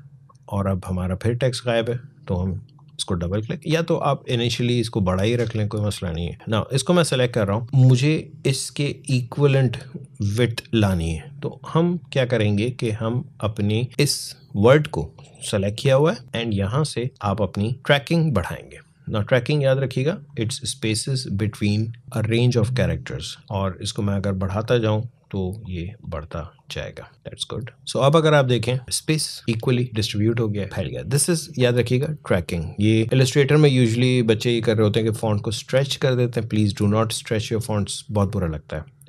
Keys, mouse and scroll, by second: 14.5 click, 23.6 click, 28.8-29.4 alt+scroll up 1.